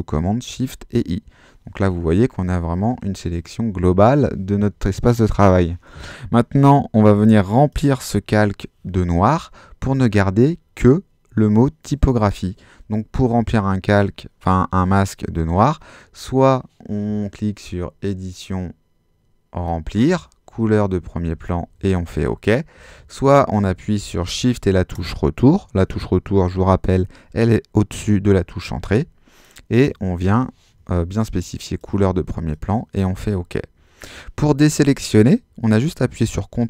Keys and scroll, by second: 0.5 shift+super+i, 22.9 super+z, 28.8 shift+BackSpace.